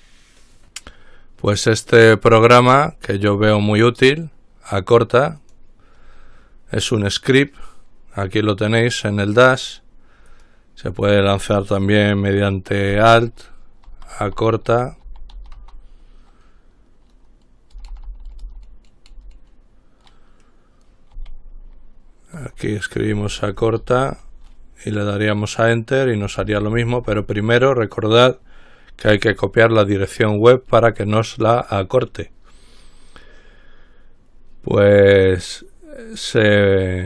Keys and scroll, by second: 13.9-16.3 typing, 18.0-18.3 typing, 22.6-24.8 typing, 26.4-26.8 typing.